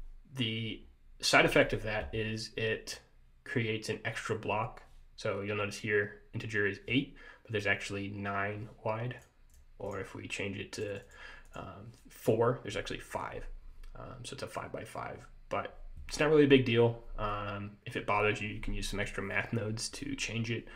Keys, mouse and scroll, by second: 0.9 scroll down 1, 9.3 click, 10.9 click, 11.2 click, 11.6 click.